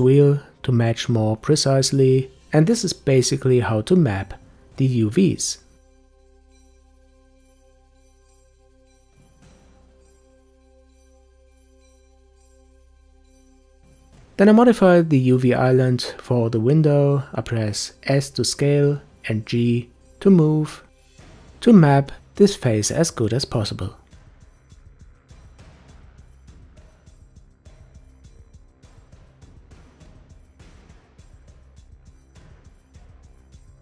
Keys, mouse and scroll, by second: 0.0-1.2 drag, 2.2 g, 10.6-11.8 drag, 13.4 scroll up 1, 14.2-15.3 scroll down 1, 15.3 s, 17.5 a, 18.2 s, 23.3 s, 26.1 g, 27.5 s, 29.6 Tab, 30.2 Tab, 30.9 Tab, 32.4 Tab, 33.5 click.